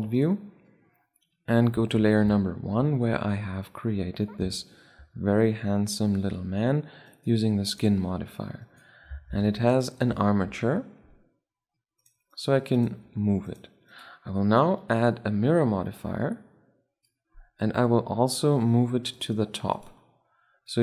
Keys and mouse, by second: 1.5 1, 2.1-4.9 drag, 6.8-11.1 right drag, 9.0 ctrl+Tab, 10.7 r, 11.1-12.0 middle drag, 12.0-15.4 right drag, 12.7 r, 14.5-16.1 drag, 18.8-20.8 drag.